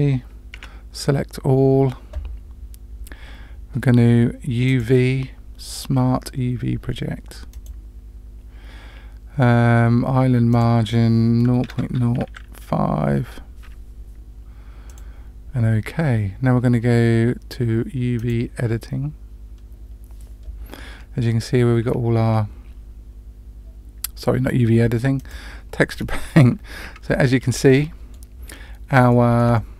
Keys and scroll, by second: 0.5 a.